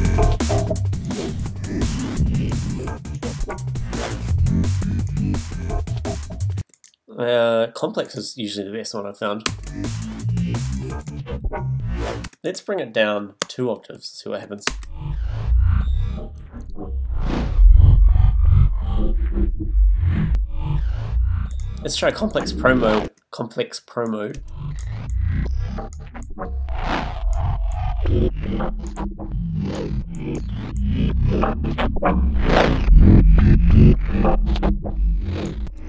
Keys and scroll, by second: 6.6 space, 10.5 space, 12.2 space, 13.2 space, 15.7 space, 23.0 space, 24.3 space.